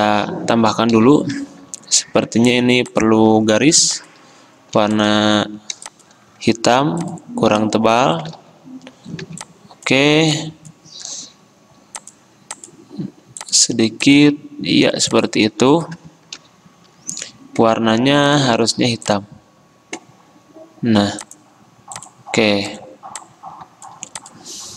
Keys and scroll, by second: 1.0 p, 4.8 v, 5.9 space, 8.4 ctrl+z, 9.3 ctrl+2.